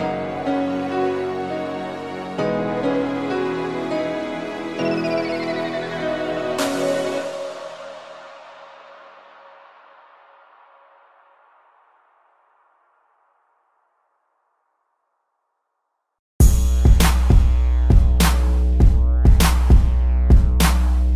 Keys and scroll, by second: 0.6 a, 1.8 v, 3.8 space, 5.4 space, 5.8 p, 9.4 space, 15.7 space, 18.2 space, 19.4 space, 20.6 ctrl+z.